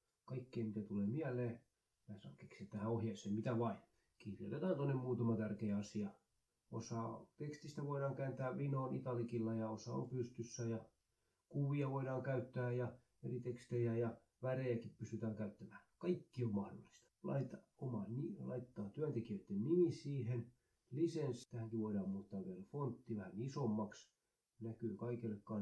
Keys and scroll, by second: 1.6 ctrl+c, 2.4 Right, 2.8-5.4 typing, 5.7 shift+Up, 5.9 ctrl+shift+Left, 6.2 ctrl+i, 6.9-9.9 typing, 8.1 ctrl+i, 8.2 Right, 10.1 ctrl+shift+Left, 10.6 ctrl+i, 10.8 Up, 11.0 Right, 11.1 Down, 12.2 ctrl+i, 13.2 2, 13.8 space, 14.4 ctrl+v, 15.4 space, 21.2-23.6 typing.